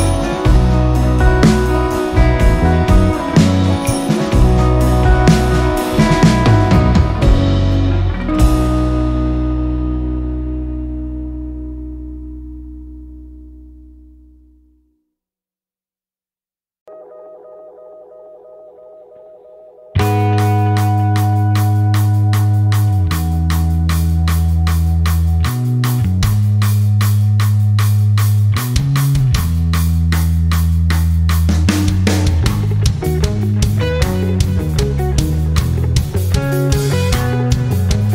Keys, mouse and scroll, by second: 2.1 click, 7.2 click, 13.2 click, 15.6 r, 16.7-22.8 drag, 23.7 c, 24.4 click, 27.0 shift+click, 32.0 ctrl+scroll down 1, 32.5 ctrl+scroll up 1, 33.4-34.0 ctrl+scroll down 2, 34.4 ctrl+scroll down 1, 35.0 space, 35.3 click, 35.5 space, 36.2 ctrl+scroll up 1, 36.7 click.